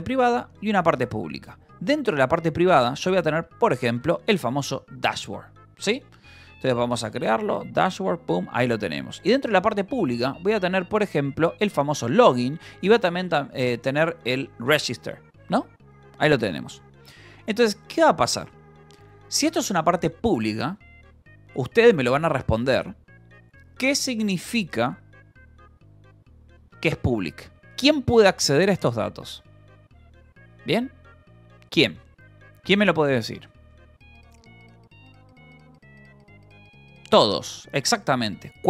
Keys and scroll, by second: 0.4 j, 0.5 Return, 1.4-14.7 typing, 4.8 Escape, 17.3 k, 18.1 j, 19.6 shift+v, 20.9 Escape.